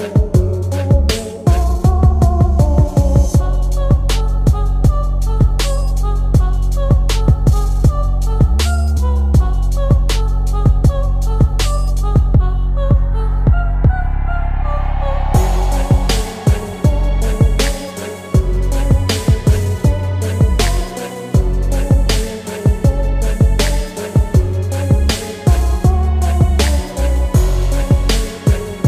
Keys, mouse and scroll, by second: 2.7 Tab, 3.2-5.5 middle drag, 6.0 alt+click, 7.1 s, 10.6 alt+click, 11.6 s, 13.9 alt+click, 14.8 s, 17.6 alt+click, 18.5 s, 20.7 Tab, 21.1 middle click, 21.8-22.1 scroll down 1, 22.1-24.5 middle drag, 24.6 s, 26.3-28.7 middle drag.